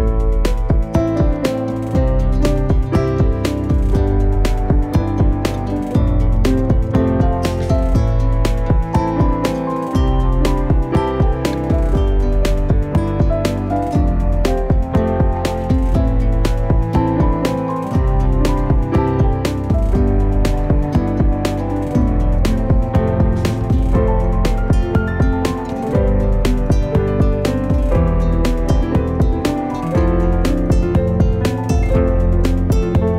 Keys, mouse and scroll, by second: 0.4 Tab, 0.6-0.9 scroll up 2, 0.9 shift+middle click, 1.8 click, 2.4 click, 3.4 g, 4.9 e, 5.5 Tab, 6.1 click, 6.4 click, 6.6-7.0 scroll down 1, 7.0 shift+middle click, 7.3-7.8 scroll down 1, 7.8-9.0 scroll up 2, 9.3-10.7 scroll down 2, 10.7 click, 11.9 shift+d, 13.2-14.0 scroll up 2, 13.4 shift+middle click, 14.0 click, 14.5 Delete, 15.2-16.7 drag, 17.7 scroll down 1, 18.0 g, 19.2 g, 19.6-21.2 scroll up 3, 21.3-25.0 typing, 25.7 Tab, 26.4 click, 29.7 middle click, 30.6 Tab, 31.2 click, 31.8 a.